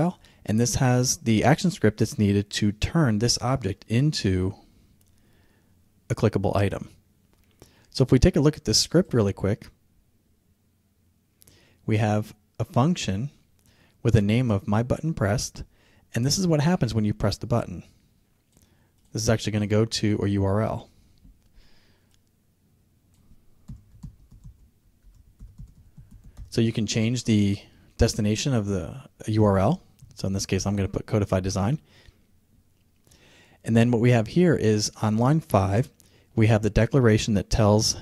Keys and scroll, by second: 28.8 Right.